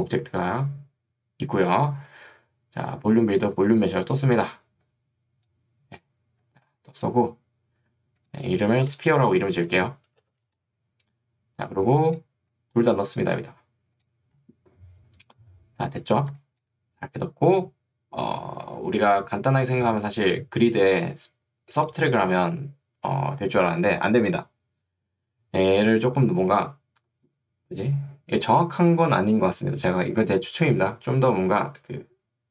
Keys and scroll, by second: 9.2 p, 10.2 r.